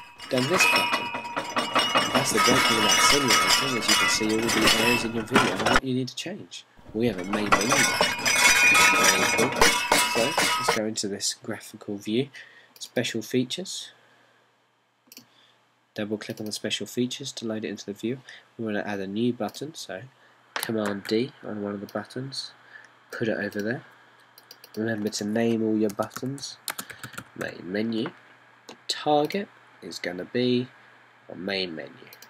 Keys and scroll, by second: 22.0 super+d, 26.8-29.0 typing.